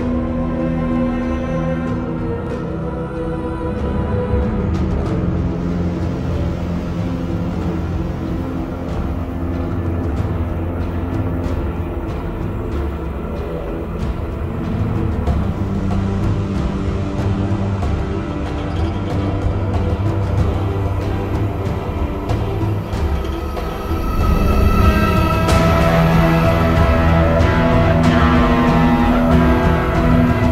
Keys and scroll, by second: 1.3-2.9 typing, 5.5-6.5 typing, 6.9 ctrl+z, 7.4 ctrl+shift+i, 7.8 ctrl+z, 9.1 v, 9.2 ctrl+d, 12.6-13.2 typing, 14.7-15.2 typing, 20.1 typing, 24.5 v, 26.6 b, 27.2 ctrl+z, 27.3 x, 27.8 ctrl+z, 28.6 ctrl+z.